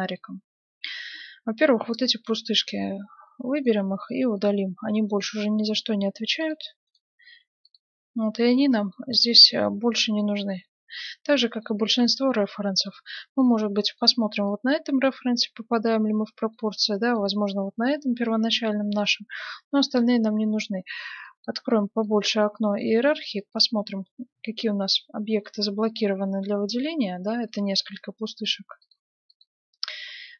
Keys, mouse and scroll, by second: 1.9-3.5 right drag, 3.5 middle click, 3.7-6.7 right drag, 4.1 x, 6.4 x, 7.0-8.6 right drag, 7.4 x, 9.0-10.0 middle drag, 11.5-13.8 middle drag, 13.8-15.5 right drag, 14.4-16.2 middle drag, 16.6-18.1 middle drag, 17.1-18.8 right drag, 18.8-20.4 middle drag, 21.2-25.0 drag, 27.4-30.3 drag.